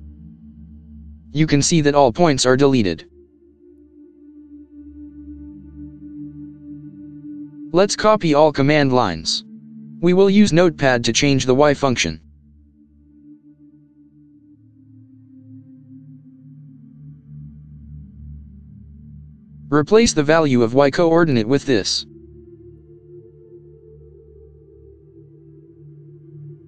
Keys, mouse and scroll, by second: 7.2-8.1 scroll up 2, 8.2-9.4 scroll down 2, 9.4-10.0 scroll up 2, 10.2-10.7 scroll down 2, 12.1 click, 13.5 ctrl+c, 18.4 ctrl+c, 20.1 ctrl+x, 22.6 ctrl+v.